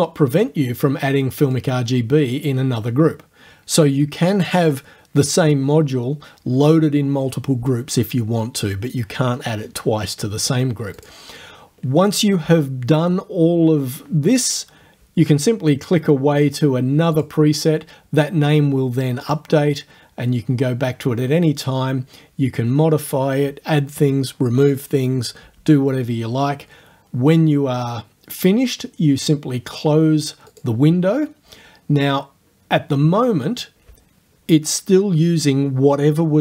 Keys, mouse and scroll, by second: 0.4 click, 1.6-2.6 drag, 11.0 click, 11.2-15.8 middle drag, 17.2 click, 19.3 click, 30.5 click.